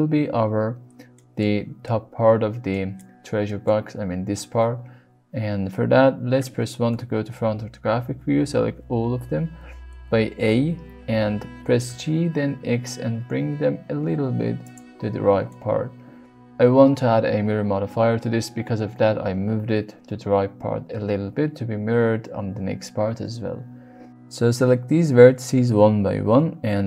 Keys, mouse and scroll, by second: 1.1 middle click, 2.8 middle click, 3.4 middle click, 6.8 KP_1, 8.4 a, 11.1 g, 11.8 x, 14.6 click, 15.4 middle click, 24.5 middle click, 25.4 click, 26.6 v.